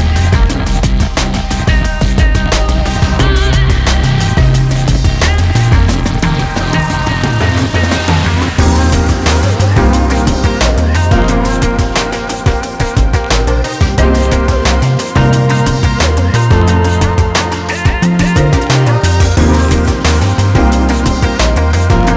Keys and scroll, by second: 14.7-15.2 typing, 17.1-17.8 typing.